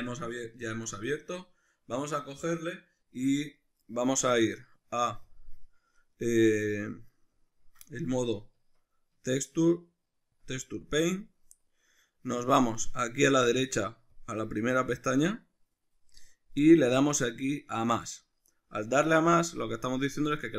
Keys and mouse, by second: 0.2 Tab, 5.3 click, 7.4 click, 8.0 Tab, 10.5 click, 14.1 click, 18.1-20.5 drag.